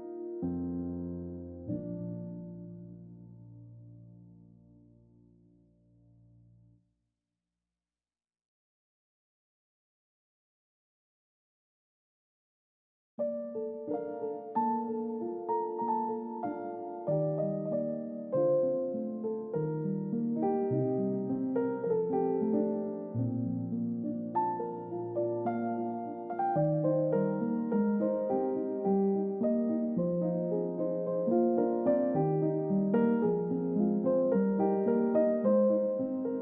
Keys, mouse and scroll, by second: 5.0 middle click, 11.5 middle click, 11.8-12.5 scroll up 2, 12.1 middle click, 15.0 ctrl+d, 16.6 double click, 28.0-28.6 scroll down 1, 28.6 alt+click, 29.6-30.0 alt+scroll up 2, 30.0 alt+click, 30.8 middle click.